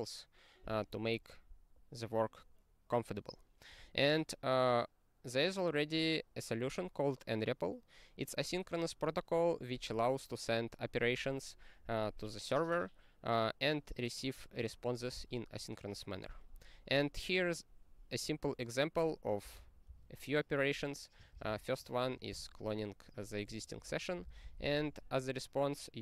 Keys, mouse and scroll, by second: 1.7-5.0 scroll down 46, 5.0-10.0 scroll down 1, 16.7-18.5 scroll down 44, 18.5 click, 18.6 click, 19.4 ctrl+space, 19.5 ctrl+p, 19.9 ctrl+g, 21.3 ctrl+space, 21.5 ctrl+n, 22.3 ctrl+g, 23.8 ctrl+n, 24.1 ctrl+space, 24.2 ctrl+n, 24.4 ctrl+n, 24.5 ctrl+n, 24.7 ctrl+n.